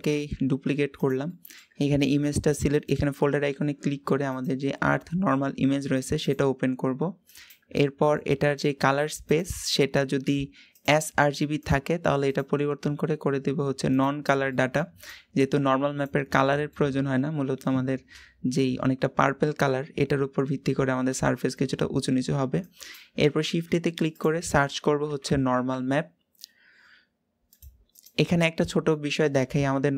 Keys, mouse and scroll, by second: 0.2 shift+d, 2.9-5.2 drag, 6.1 click, 11.6-14.3 drag, 14.3-29.9 middle drag.